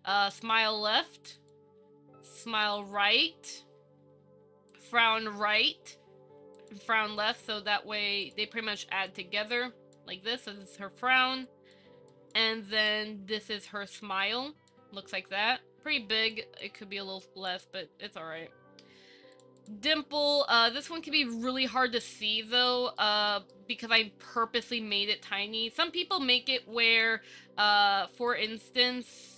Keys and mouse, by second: 2.9 click, 4.9 click, 9.1 click, 9.8 click, 11.7 click, 12.3 click, 13.7 click, 14.5 click, 16.5 click, 17.4 click, 20.9 click, 22.3 z, 23.2-23.5 middle drag, 23.7 shift+middle click, 24.5 shift+middle drag, 24.9-25.3 middle drag, 26.1 middle drag, 27.1 KP_1, 27.4 Tab, 28.4 shift+middle click.